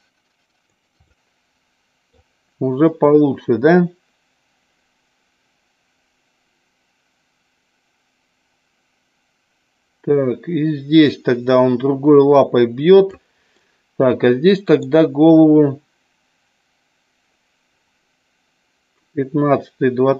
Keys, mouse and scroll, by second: 1.0-2.1 middle drag, 3.1-13.1 drag, 13.6-14.9 middle drag.